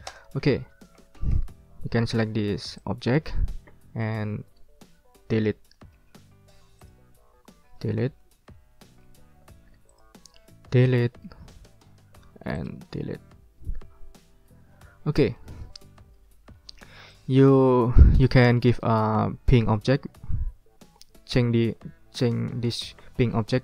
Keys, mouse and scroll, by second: 0.1 ctrl+middle click, 0.5-0.9 ctrl+scroll up 2, 1.0 ctrl+middle click, 1.3 ctrl+scroll down 2, 1.9 ctrl+scroll up 2, 2.8-4.2 drag, 4.2-4.7 ctrl+scroll down 2, 5.5 Delete, 5.7-6.4 scroll up 2, 6.8 ctrl+click, 7.8 Delete, 8.4 ctrl+scroll down 2, 8.7 ctrl+middle click, 9.2-9.7 ctrl+scroll up 2, 10.6 Delete, 11.1 middle click, 11.5 ctrl+scroll down 2, 12.2 ctrl+scroll up 2, 12.5 ctrl+click, 13.5 Delete, 14.7-15.2 ctrl+scroll down 4, 15.4 ctrl+middle click, 16.5 ctrl+scroll up 2, 17.1 ctrl+middle click, 17.6 ctrl+scroll down 2, 18.4-19.9 ctrl+drag, 19.9 ctrl+z, 20.3 ctrl+scroll up 2, 21.0 ctrl+scroll up 2.